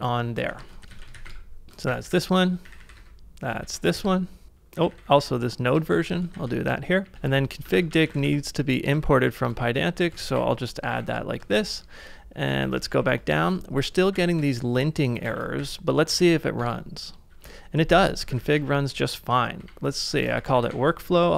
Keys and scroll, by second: 0.1-5.8 typing, 3.6 super+v, 4.0 ctrl+c, 6.1 super+v, 6.4 ctrl+c, 6.8-9.7 typing, 10.3 ctrl+c, 10.3 ctrl+p, 10.9 p, 11.6 shift+8, 12.7 ctrl+d, 12.8 ctrl+d, 13.0 ctrl+d, 13.8-14.6 typing, 15.4 ctrl+a, 16.3 Up, 16.6 Return, 18.4 ctrl+a, 19.6-21.3 typing.